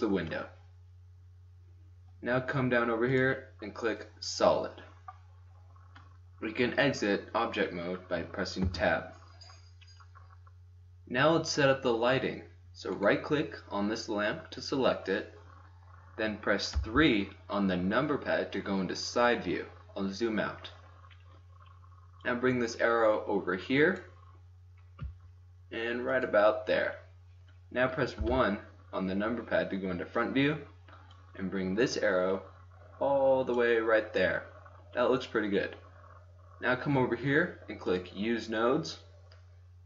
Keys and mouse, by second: 0.4 middle click, 1.4 middle click, 4.2 click, 5.2-8.4 middle drag, 8.6 Tab, 12.9-14.8 right drag, 16.7 KP_3, 22.1-23.9 drag, 25.0 g, 28.1 KP_1, 28.7-30.8 middle drag, 31.1-32.9 drag, 33.5-34.4 middle drag, 34.5-37.9 middle drag, 37.9-39.8 drag.